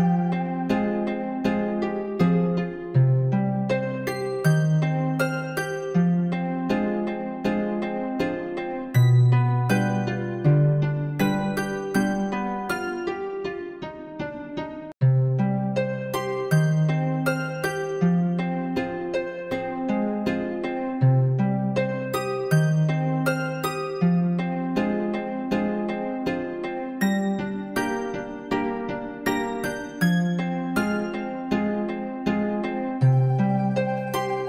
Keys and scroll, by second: 18.4 ctrl+b.